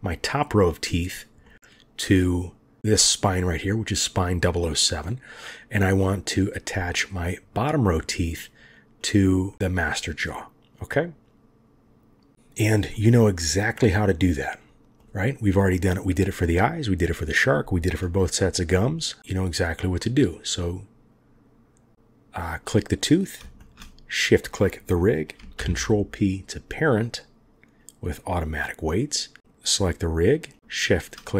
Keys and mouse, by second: 0.3 middle click, 1.4-2.2 middle drag, 2.8 click, 6.0-7.0 middle drag, 8.0 middle drag, 9.4-12.5 middle drag, 12.8 middle click, 13.4 middle drag, 14.6 click, 15.4 middle click, 20.2 click, 23.5 shift+click, 25.5 ctrl+p, 29.4-30.7 drag.